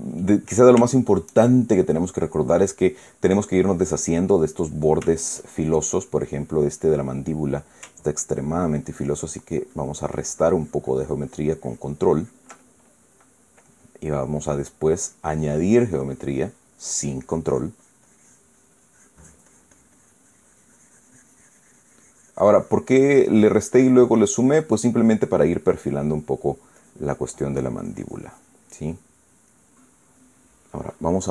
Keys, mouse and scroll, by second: 0.2 shift+click, 0.5-1.6 shift+middle drag, 2.5-6.2 middle drag, 8.7-13.3 ctrl+drag, 13.3 ctrl+middle click, 14.3-15.4 middle drag, 15.7-27.3 drag, 25.4-27.3 middle drag, 27.5-29.4 drag, 29.4-30.8 middle drag.